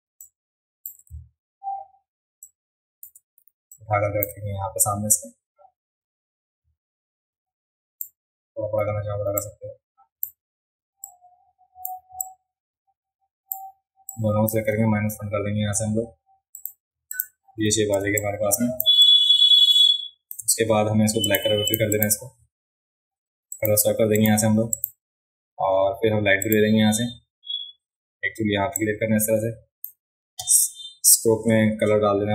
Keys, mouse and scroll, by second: 0.2 shift+click, 2.5 shift+click, 3.7 click, 4.8-8.0 drag, 9.4 click, 11.0-11.8 drag, 12.2-13.5 drag, 14.1-14.5 drag, 16.5 click, 17.1 click, 18.0 space, 18.1-18.8 drag, 19.0-20.3 drag, 21.3 click, 21.7 click, 21.9 click, 23.5 click, 24.2 click, 24.7 click, 26.4 click, 28.7-29.8 drag.